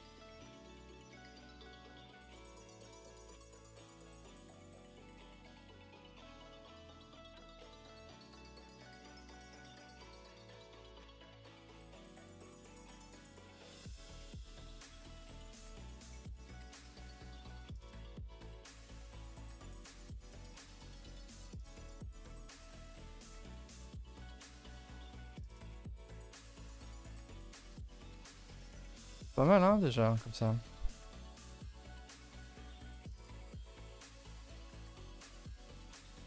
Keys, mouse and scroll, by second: 1.3-4.2 typing, 4.9-6.0 middle drag, 6.0 1, 6.3 click, 6.5 g, 7.0 click, 7.1 g, 7.7 middle click, 8.1 3, 8.2 click, 8.5-9.9 middle drag, 9.9 e, 10.8 g, 11.7 r, 12.3 middle click, 12.8 r, 14.0 r, 14.4 g, 15.0 middle click, 15.4 s, 15.9 1, 16.1 middle click, 16.7-17.1 scroll up 2, 17.1 click, 17.3 middle click, 17.8 g, 18.9 click, 19.0 g, 19.6-20.8 middle drag, 20.8 click, 20.9 g, 21.4-22.9 middle drag, 22.9 click, 23.2 g, 23.8 click, 24.0 g, 25.3-26.7 middle drag, 26.7 click, 27.1 scroll down 2, 27.2 Tab, 27.4-29.0 middle drag, 29.0 click, 29.3 Tab, 29.4 scroll up 2, 30.0 alt+click, 30.4 r, 31.2 s, 31.7 g, 33.3 3, 33.5 click, 34.1 r, 34.7 g, 36.0 click.